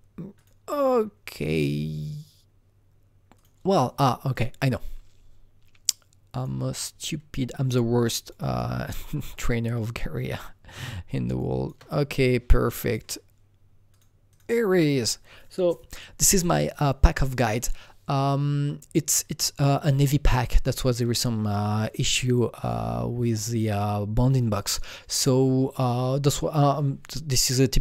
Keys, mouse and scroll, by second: 3.3 click, 3.4 click, 4.3 click, 6.8-9.3 drag, 9.3-12.5 shift+drag, 12.5-13.9 shift+drag, 13.9 click, 14.3-16.4 drag, 16.4 click, 19.2 click, 19.3-22.2 drag.